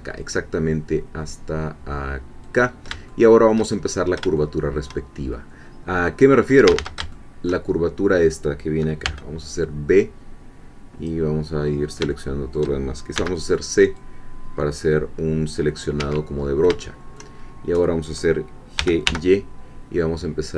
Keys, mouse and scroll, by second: 2.4 click, 3.1 shift+click, 3.8-4.2 shift+scroll up 2, 4.4-5.4 shift+drag, 6.2-6.6 scroll up 2, 6.6 a, 7.1 shift+click, 7.8 shift+middle click, 9.0 b, 10.0-11.2 drag, 11.4-12.0 scroll down 2, 12.1-13.1 shift+middle drag, 13.2 c, 14.0-16.0 drag, 16.0 Escape, 16.4 scroll up 1, 16.8 shift+middle click, 17.5 shift+scroll up 1, 18.8 g, 19.0 y.